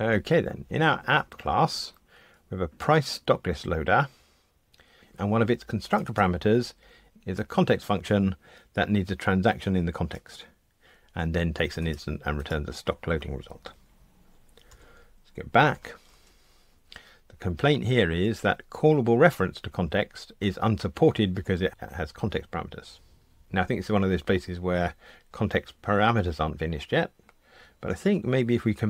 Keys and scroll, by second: 14.7 super+[, 27.8 alt+Return.